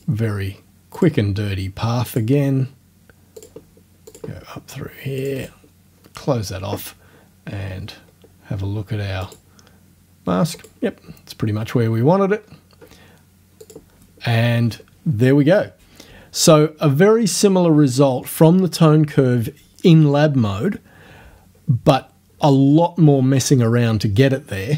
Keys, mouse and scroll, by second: 1.0 click, 2.1 click, 3.4 click, 4.1 click, 5.2 click, 5.4 right click, 8.1 scroll down 1, 9.3 click, 10.6 click, 12.4 scroll up 2, 13.7 click.